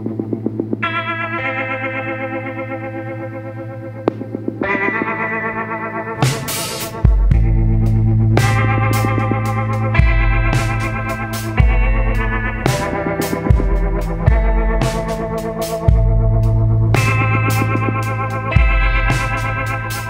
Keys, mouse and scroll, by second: 1.0 click, 1.5 click, 4.5 click, 9.4 click, 12.3 click, 14.4 click, 18.6 click.